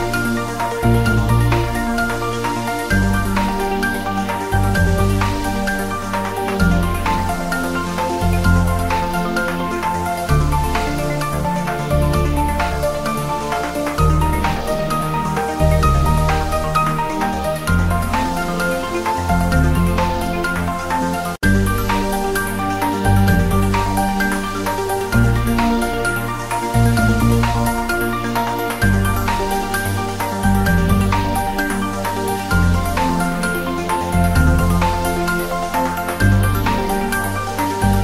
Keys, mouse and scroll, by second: 0.1 s, 1.1 click, 1.3 g, 2.1 click, 2.7-3.1 scroll up 1, 3.3 g, 5.2 click, 5.5 scroll down 1, 7.2 click, 7.4-7.9 scroll up 1, 7.9 r, 8.3 click, 8.5 g, 9.8 click, 10.1-10.7 scroll down 1, 12.7 click, 13.0 scroll up 1, 13.3 click, 13.6 s, 15.1 click, 15.5 s, 15.8 click, 15.9 s, 16.9 click, 17.2 scroll down 1, 18.0 click, 18.4 Tab, 18.6 click, 19.0 3, 19.2 click, 19.8 3, 20.0 scroll down 1, 20.7-21.1 scroll down 1, 21.1 Tab, 21.6 click, 22.4-23.5 drag, 23.5 Tab, 23.7-24.1 scroll down 1, 24.8-25.4 scroll down 1, 25.7 scroll up 1, 26.7 click, 27.3 x, 27.4 click, 27.6-28.2 scroll down 1, 28.2 click, 28.6 ctrl+z, 30.0 x, 30.2 click, 31.8-32.6 scroll up 2, 32.1 click, 32.8 Caps_Lock, 32.9-33.7 typing, 34.9 Left, 35.2 click, 36.0-36.4 scroll up 1, 36.8 click, 37.1 g, 37.8 Right.